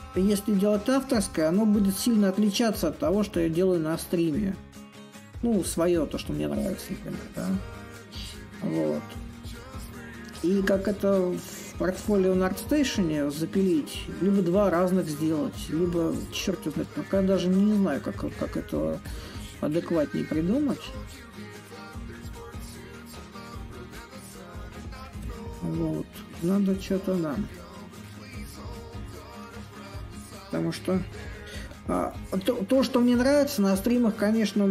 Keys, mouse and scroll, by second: 0.0-5.0 drag, 5.8-10.8 drag, 12.5-17.5 drag, 18.8 click, 19.5-20.8 shift+drag, 25.2 click, 25.4-28.0 drag, 28.0 a, 29.1-30.7 drag, 30.7 s, 32.3-34.7 drag.